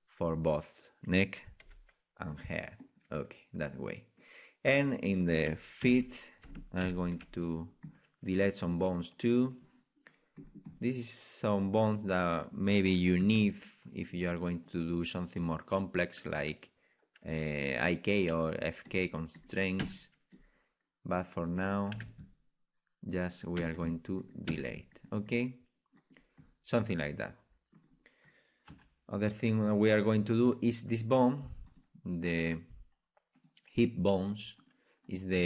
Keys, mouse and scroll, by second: 1.6 g, 2.3-3.3 drag, 3.7 click, 4.2 middle click, 4.7-6.6 drag, 5.8 KP_Decimal, 7.5-10.6 middle drag, 10.6-12.1 scroll up 1, 12.1-13.8 right drag, 13.2 KP_Decimal, 14.1-14.6 scroll up 1, 14.6-16.1 middle drag, 16.1-17.9 right drag, 18.3 Delete, 19.3-21.0 right drag, 19.8 Delete, 21.1-26.0 right drag, 21.9 Delete, 23.5 Delete, 24.4 Delete, 25.0 middle click, 25.3 click, 26.0-30.5 middle drag, 28.6 KP_1, 30.5-31.8 right drag, 31.6-34.2 drag, 32.0 right click, 32.2 right click, 34.6-35.4 right drag, 34.9 middle click.